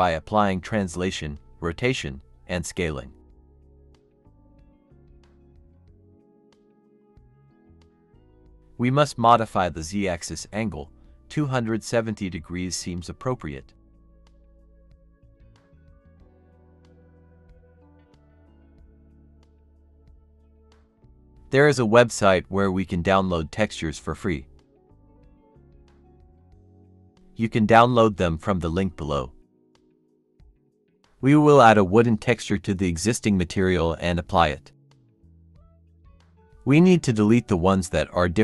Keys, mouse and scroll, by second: 6.7 middle click, 7.3 scroll up 1, 8.1-9.4 typing.